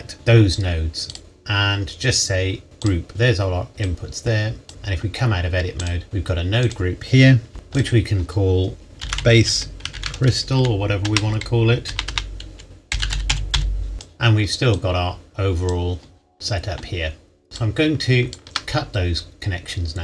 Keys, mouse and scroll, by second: 0.1 right click, 2.8 click, 4.7 Tab, 5.8 click, 6.0-6.6 scroll up 1, 6.6 click, 9.0-11.8 typing, 12.9-13.5 typing, 13.9 click, 17.6 ctrl+right click, 19.6-20.0 scroll up 1.